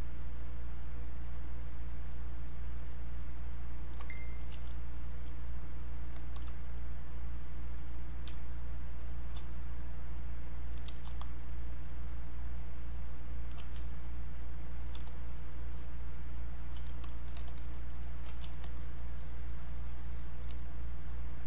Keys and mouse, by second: 4.5 q, 7.4 click, 8.3 space, 8.7 click, 8.8 space, 9.7 click, 11.0 r, 12.5 click, 13.6 q, 14.0 click, 14.9 e, 15.7 click, 17.6 alt+click, 18.3 q, 18.8-21.4 shift+drag.